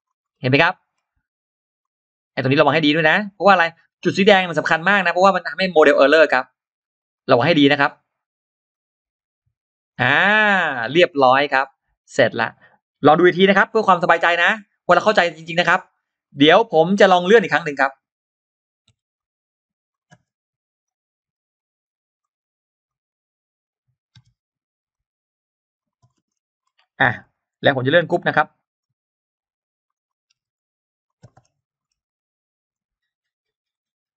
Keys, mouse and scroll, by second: 0.1-0.7 scroll down 2, 1.0 scroll up 2, 1.6 click, 1.9 click, 3.3-4.8 drag, 5.1 scroll down 2, 5.6 click, 6.1-6.4 scroll up 2, 6.8 click, 7.1 click, 8.5-9.8 drag, 10.1 click, 10.3-11.0 scroll down 2, 11.5-11.8 scroll up 2, 15.0 click, 15.6 click, 16.1 scroll down 2, 16.4-16.8 scroll up 2, 17.2 click, 17.7 click, 19.0 click, 19.0 m, 19.7 click, 20.7-22.1 drag, 20.7 space, 22.0 space, 22.0 m, 22.7 click, 24.7 click, 25.6 click, 25.9 middle click, 25.9-26.2 scroll down 1, 25.9 space, 26.4 scroll up 1, 27.6 click, 28.5 Escape, 28.5 click, 28.5 space, 28.6 click, 29.0 click, 29.8 Escape, 29.8 click, 29.8 space, 30.4 click, 30.4 m, 30.9 click, 31.2 scroll down 1, 31.2 space, 31.6 scroll up 1, 32.5 click, 32.8 click, 33.3 click.